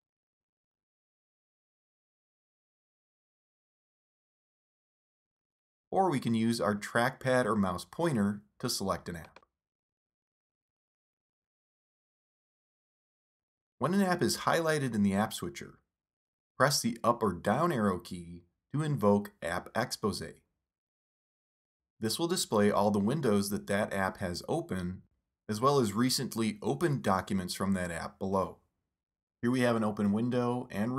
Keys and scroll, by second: 5.8 super+Tab, 6.5 super+Tab, 10.4 super+Tab, 11.4 super+Right, 14.9 super+Tab, 16.9 super+Up, 22.3 super+Tab, 24.6 super+Tab, 27.2 super+Up.